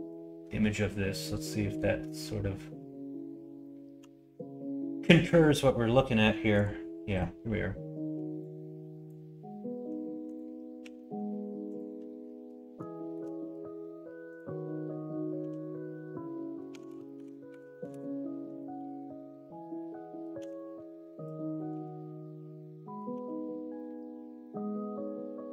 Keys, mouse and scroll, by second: 10.8 s, 12.9 middle click, 16.7 s, 20.3 g, 21.7 s, 23.1 g.